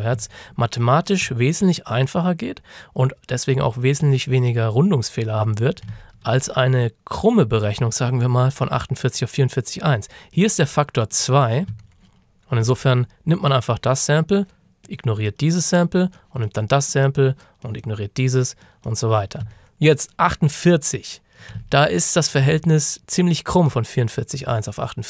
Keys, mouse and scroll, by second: 1.0 ctrl+shift+scroll down 1, 1.5-3.3 scroll down 1, 6.1 ctrl+shift+scroll up 1, 7.7 click, 10.4 click, 11.8-12.2 ctrl+scroll down 1, 12.4-14.7 ctrl+shift+scroll up 2, 14.7 scroll up 1, 14.9 click, 19.6 ctrl+scroll down 1, 19.9 click, 21.8 ctrl+shift+scroll up 1, 24.5 scroll up 1.